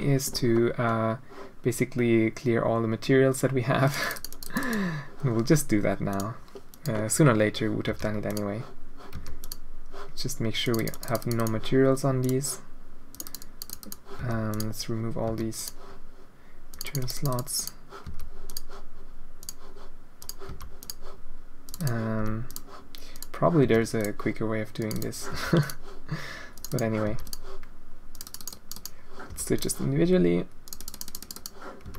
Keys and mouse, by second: 0.5-1.0 drag, 0.6 middle click, 4.0 click, 4.3 click, 6.1 click, 6.7 click, 7.8 h, 8.3 click, 9.1 h, 9.4 click, 10.6 right click, 10.9 right click, 11.1 click, 11.3 right click, 11.4 click, 13.1 click, 13.2 click, 13.4 click, 14.2 h, 14.5 click, 15.3 h, 15.5 click, 16.7 click, 16.8 click, 17.1 click, 17.5 click, 18.0 h, 18.4 click, 19.4 click, 20.2 click, 20.5 h, 20.8 click, 21.6 click, 21.8 click, 22.2 h, 22.5 click, 23.1 click, 23.6 h, 24.0 click, 24.8 click, 25.3 h, 25.6 right click, 26.5 right click, 26.7 right click, 27.0 h, 27.2 right click, 28.1 click, 28.2 click, 28.5 click, 29.3 h, 29.5 click, 30.6 click, 30.9 click, 31.1 click, 31.8 h.